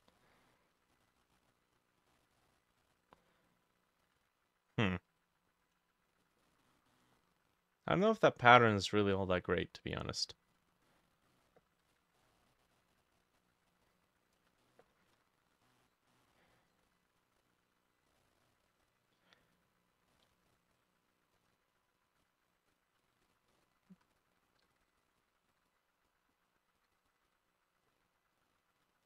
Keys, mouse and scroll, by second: 0.2-2.1 middle drag, 6.2 scroll down 1, 6.5 middle click, 8.7 scroll, 8.7 middle click, 8.7-9.9 scroll up 3, 10.5-10.9 scroll down 2, 10.9 middle click, 11.9 ctrl+,, 13.8 shift+middle click, 14.7 ctrl+j, 14.9 ctrl+middle click, 15.1 ctrl+j, 15.8 shift+middle click, 16.4-18.3 shift+drag, 20.1-21.7 shift+middle drag, 21.8 shift+middle click, 22.2 shift+click, 22.7 shift+click, 23.3 scroll down 2, 23.5 middle click, 24.0 t, 24.1 scroll, 24.6 Right, 24.8 Right, 24.9 Right, 25.0 Right, 25.2 Right, 26.1 shift+Left, 26.1 Right, 26.8 Right, 27.0 Right, 27.1 Right, 27.3 Left.